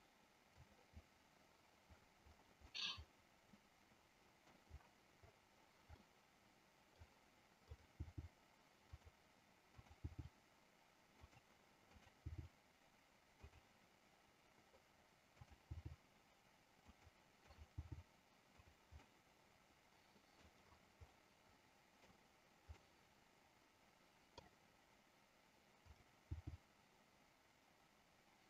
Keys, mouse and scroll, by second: 2.7 middle click, 3.4 scroll up 1, 3.9 middle click, 5.9-6.3 scroll up 1, 6.3 middle click, 7.7 click, 9.1 g, 9.9 click, 11.3 click, 11.3 g, 13.5 click, 13.5 g, 17.0 click, 17.0 g, 17.6 click, 19.2-20.6 middle drag, 21.2 middle click, 22.8-24.5 middle drag.